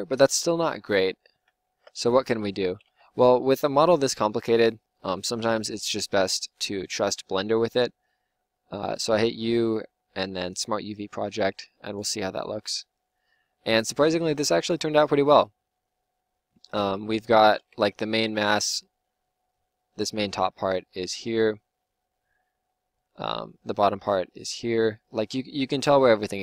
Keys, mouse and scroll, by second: 0.3 ctrl+z, 0.8 ctrl+z, 1.1 ctrl+z, 1.4 ctrl+z, 2.6 a, 2.8 a, 5.6 u, 17.7 Tab, 18.1 Tab.